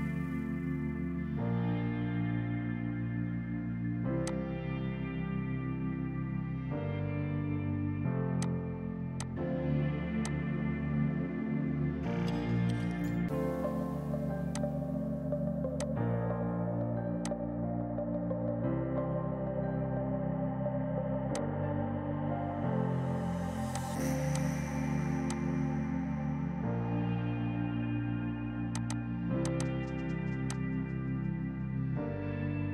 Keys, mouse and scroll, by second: 0.3 Right, 4.2 F2, 4.2 click, 4.5 right click, 8.1-8.9 typing, 8.4 click, 9.1 click, 14.4 F2, 14.5 click, 14.7 right click, 15.8 click, 22.5 space, 23.7 click, 25.7 Right, 28.7 click.